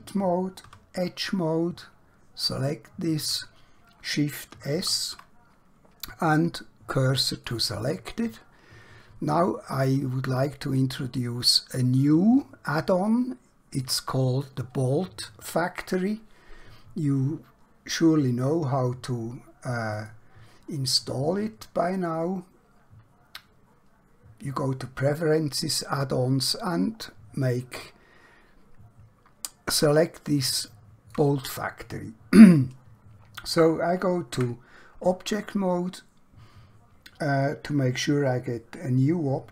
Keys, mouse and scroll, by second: 0.6 2, 2.5 alt+click, 4.8 shift+s, 7.4 click, 8.5-9.5 scroll down 1, 9.5 middle click, 12.0 scroll down 1, 13.0 shift+middle click, 19.9 click, 27.0 scroll up 1, 28.2 scroll down 1, 29.6 scroll up 1, 30.4 shift+middle click, 34.3 Tab.